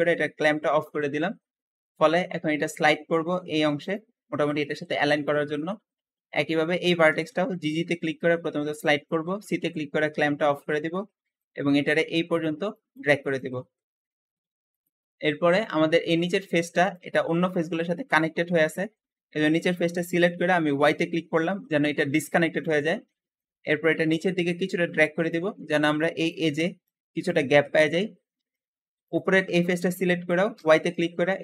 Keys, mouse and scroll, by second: 5.5 Escape, 6.3 click, 6.9 g, 7.1 g, 8.0 c, 13.7 Escape, 14.6 click, 15.1 Escape, 16.0 g, 18.0 middle click, 18.7-19.1 scroll up 1, 20.8 y, 21.6 g, 21.7 g, 22.9 middle click, 23.5-24.3 scroll up 1, 24.3 click, 27.7 Escape, 28.1 scroll down 1, 28.4 shift+middle click, 28.9 click, 30.5 y, 31.1 g, 31.3 g.